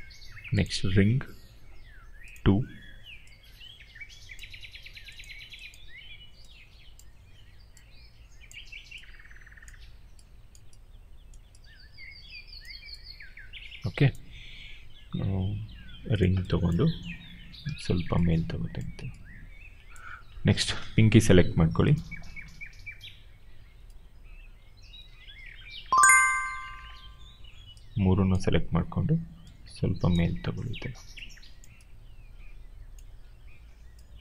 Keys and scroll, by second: 17.6 ctrl+z.